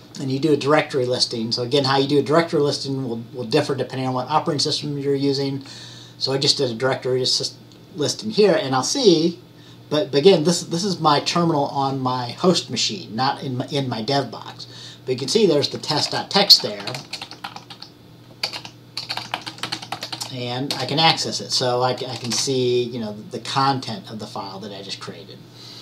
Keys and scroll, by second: 0.0-0.1 typing, 16.5-20.7 typing.